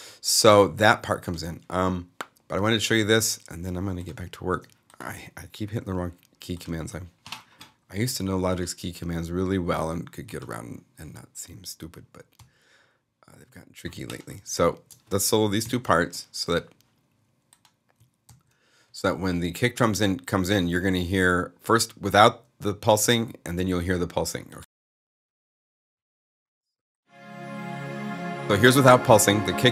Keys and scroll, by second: 15.5 alt+super+a, 18.1 alt+s.